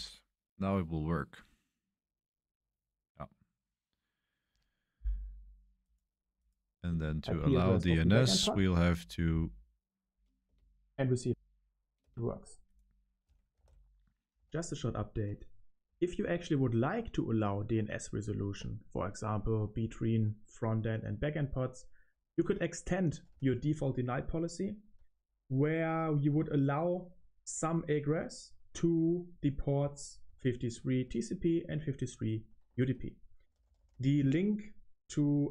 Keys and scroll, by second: 10.2-11.9 typing, 13.2-17.0 typing, 15.2 Return, 18.2 o, 18.9 BackSpace, 20.0 BackSpace, 22.1-25.8 typing, 26.8-27.5 typing, 28.1 Return, 29.2-34.5 typing.